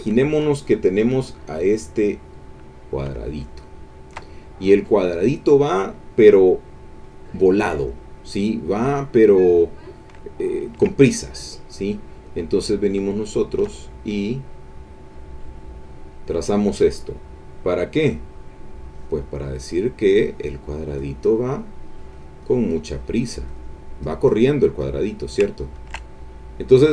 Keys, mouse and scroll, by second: 1.0 click, 1.7 click, 2.9-4.3 shift+drag, 5.2 middle click, 7.0 click, 9.3 click, 9.9-10.9 ctrl+middle drag, 12.1 click, 15.3 click, 17.6 click, 18.8 click, 19.3-22.0 drag, 22.1-23.4 drag, 23.5 click, 24.0 click, 24.8 click, 25.1 click, 25.5 ctrl+middle click.